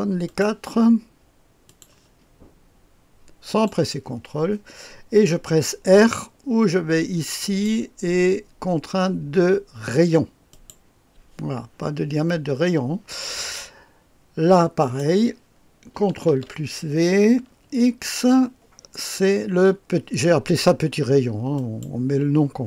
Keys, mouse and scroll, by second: 0.2 click, 1.6 click, 3.4 click, 7.4 click, 10.5 click, 14.8 click, 15.2 click, 16.2 ctrl+v, 17.6 x, 21.5 click.